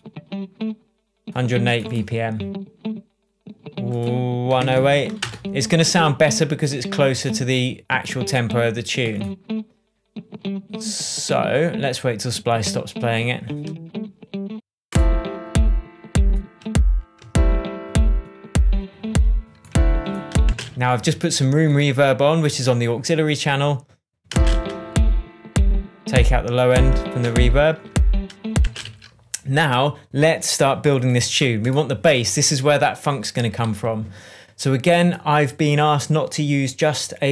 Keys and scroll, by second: 4.2-5.2 typing, 17.2 shift+Tab, 20.4 space, 20.9 Tab, 24.2 space, 27.2 Tab, 27.8 super+Tab, 28.6 super+space, 28.8 super+s.